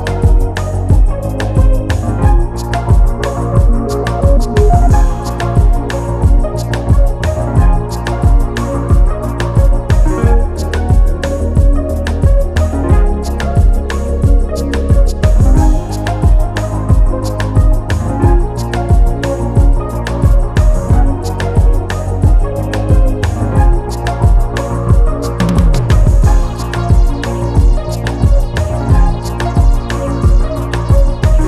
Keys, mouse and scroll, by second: 0.5 click, 0.7 g, 1.2 scroll down 1, 1.4 drag, 1.6 scroll up 2, 2.0 shift+a, 3.0-3.6 scroll down 9, 3.6 r, 5.1 g, 5.4 scroll up 1, 5.6 s, 6.0 scroll up 3, 6.2-6.6 scroll down 2, 6.6 g, 7.2-7.6 scroll up 2, 7.6 click, 8.2 s, 9.8 g, 10.8 s, 11.9 g, 13.2 g, 15.1 scroll down 2, 15.3-15.7 scroll up 3, 15.7 Tab, 16.7-17.9 drag, 18.0 click, 18.7-19.9 drag, 21.7 3, 22.2 click, 22.9 x, 23.7 Tab, 24.3 click, 24.7-25.3 scroll down 7, 25.5 click, 25.7-26.2 scroll down 1, 26.2 g, 27.0-27.5 scroll up 10, 27.5 click, 28.6 click, 28.8-29.1 scroll up 3, 29.1 Tab, 29.5 a, 29.8 e, 30.6 Tab, 30.7-31.2 scroll down 1, 31.2 shift+d.